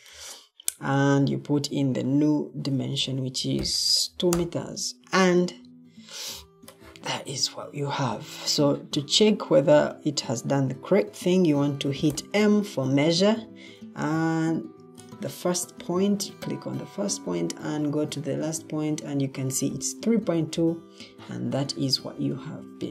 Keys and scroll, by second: 2.9-4.3 typing, 12.0 m, 22.2 Escape.